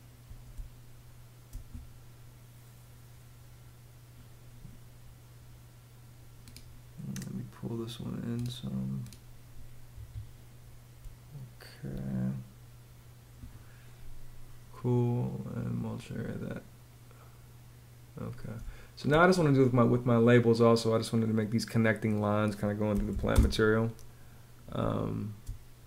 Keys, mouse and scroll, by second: 0.0 space, 10.6 space, 18.1 space, 22.2-23.1 typing, 24.3 space.